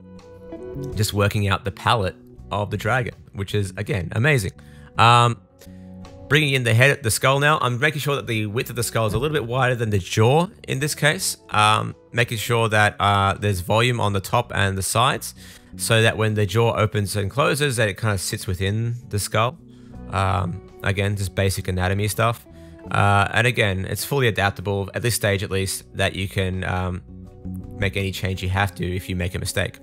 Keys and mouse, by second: 0.0 middle click, 0.0 right click, 0.2 r, 0.5 middle click, 0.5 right click, 0.9 middle click, 0.9 right click, 1.5 Tab, 2.0 super+s, 2.5-3.9 middle drag, 3.3 super+s, 3.9 click, 4.2 Tab, 4.4-5.3 typing, 4.7 middle click, 4.8 click, 5.1-8.1 middle drag, 7.6 r, 8.1 click, 8.7 middle click, 9.7 click, 9.7 middle click, 11.0 click, 11.5 super+z, 11.7 KP_3, 12.0 KP_3, 13.2 s, 14.4 KP_3, 14.6-16.7 shift+super+drag, 16.4 s, 16.7-18.4 middle drag, 18.5 super+z, 18.5 middle click, 18.9 super+s, 19.2 super+s, 19.2 click, 20.5 click, 20.7 click, 21.0 click, 21.6 click, 23.0 click, 23.1 middle click, 23.4 middle click, 23.5 click, 23.5 middle click, 24.2 shift+middle click, 24.9 r, 25.2 click, 25.2 middle click, 25.9 shift+middle click, 26.0 middle click, 26.2 middle click, 26.9 click, 27.0-28.7 middle drag, 27.5 Tab, 29.0 click, 29.0 middle click, 29.0 right click, 29.2 click, 29.2 middle click, 29.2 right click, 29.4 super+s, 29.5 click, 29.5 right click.